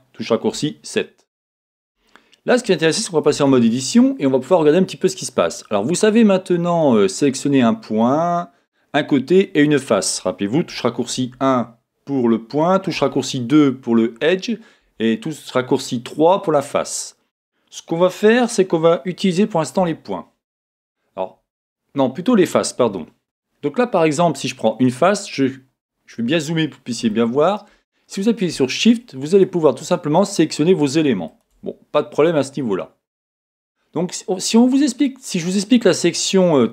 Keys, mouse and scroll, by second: 0.1 click, 0.5-1.7 shift+middle drag, 1.7-2.0 scroll down 2, 1.8 middle click, 2.1 shift+middle click, 4.5-5.1 scroll up 2, 5.1-9.1 scroll down 2, 11.1-11.4 typing, 12.9-13.7 typing, 14.8 3, 14.9-18.9 middle drag, 19.8 1, 21.0 middle click, 21.2-22.8 scroll up 2, 21.3-22.8 middle drag, 22.8 3, 23.2-24.8 right drag, 24.8 click, 25.4-26.9 scroll up 4, 26.9 scroll up 1, 27.1-28.8 shift+middle drag, 27.6 shift+scroll up 1, 28.8 shift+click, 29.3 click, 29.8 click, 30.3 click, 30.8 shift+click, 31.3 shift+click, 33.3-34.0 scroll down 3, 34.0 scroll up 1, 35.4-36.0 scroll down 1, 36.5 scroll up 1.